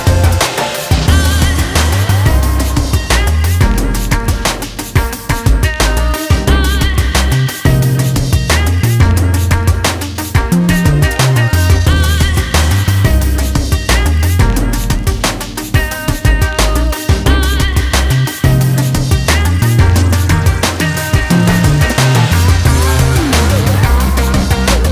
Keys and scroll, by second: 17.0-17.4 ctrl+space, 24.7 ctrl+z.